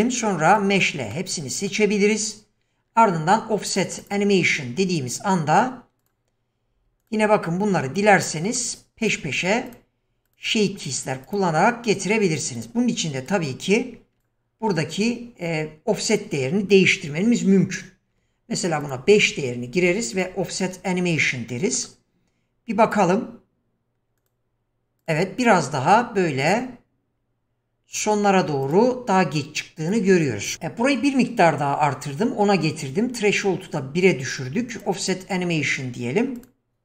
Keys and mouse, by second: 1.1-1.7 middle drag, 4.0 click, 6.0 click, 7.0 click, 8.2 shift+middle click, 9.0 click, 9.7 click, 10.3 click, 11.2 click, 12.6 drag, 13.2 click, 14.2 q, 16.1-18.9 drag, 20.2 click, 21.6 shift+middle click, 22.8 click, 24.2 click, 25.1 click, 26.4 click, 27.9 click, 29.9 click, 34.7 click, 36.4 click.